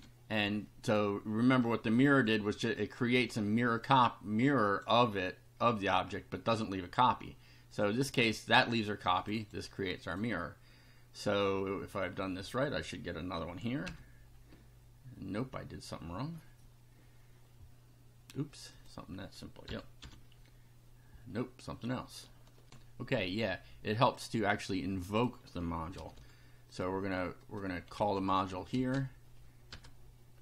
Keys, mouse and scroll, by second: 0.0-0.4 typing, 1.6 click, 3.8-4.9 drag, 7.7 click, 9.2 click, 10.0 click, 13.8 F5, 18.7 click, 19.6 r, 20.0 F5, 22.6 ctrl+r, 24.2-25.4 drag, 25.9 ctrl+c, 26.7 ctrl+click, 27.4 click, 28.0 ctrl+v, 28.8 space, 29.7 BackSpace.